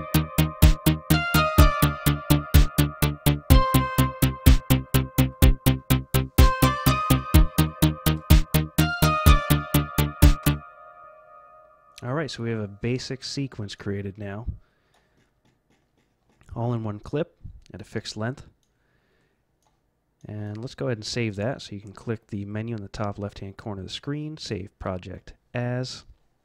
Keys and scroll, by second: 10.4 F12.